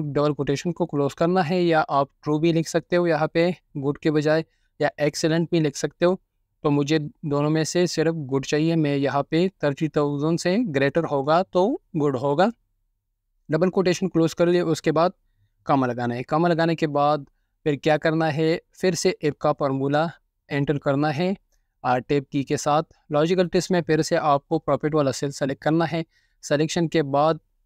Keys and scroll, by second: 0.1-11.6 typing, 12.9 typing, 16.0 typing, 18.8 typing, 21.0 Tab, 21.5-22.2 typing, 25.3 typing.